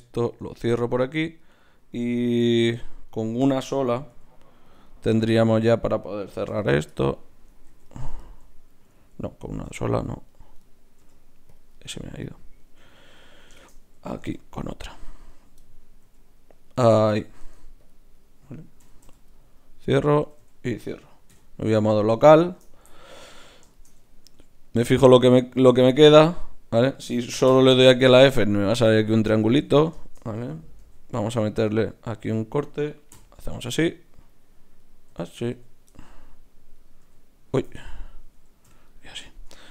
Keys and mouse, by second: 0.4 f, 2.4 ctrl+r, 4.1 g, 4.7-6.7 drag, 5.6-6.9 right drag, 6.6 f, 6.9 middle click, 7.7 ctrl+z, 9.5 ctrl+Tab, 10.3-11.7 drag, 10.6-11.7 right drag, 11.0 g, 11.7 middle click, 13.0 g, 14.2 ctrl+r, 16.0 g, 16.9 click, 17.4 ctrl+Tab, 18.1 click, 18.8 f, 19.0 f, 19.3-20.6 drag, 20.2 f, 20.4 f, 21.3 KP_Divide, 26.0-27.7 right drag, 27.6 f, 27.7 f, 28.9 ctrl+z, 29.3 ctrl+z, 30.8 ctrl+r, 32.3 right click, 33.2 f, 34.8 click, 35.1 f, 35.5 f, 37.0 f, 37.7 ctrl+z, 38.6 f.